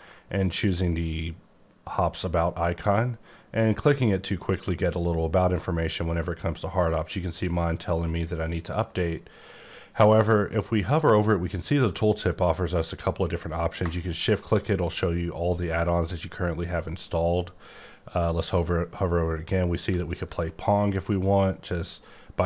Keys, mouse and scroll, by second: 2.8 click, 8.9 click, 14.1 click, 19.9 ctrl+Num_Lock, 20.0 ctrl+click, 21.6-22.4 scroll up 27.